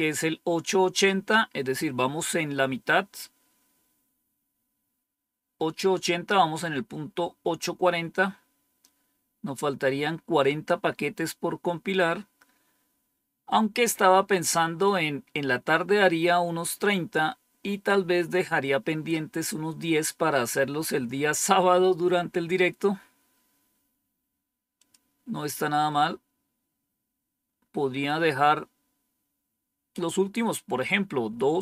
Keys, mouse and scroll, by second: 24.7 click, 26.4-27.3 scroll up 1, 27.3-28.1 scroll down 1.